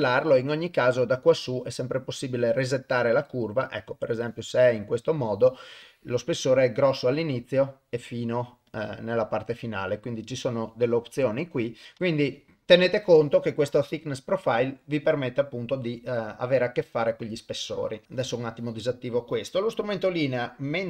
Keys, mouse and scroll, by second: 5.9-7.2 drag, 8.7-12.2 drag, 18.0 click, 20.3-20.8 drag.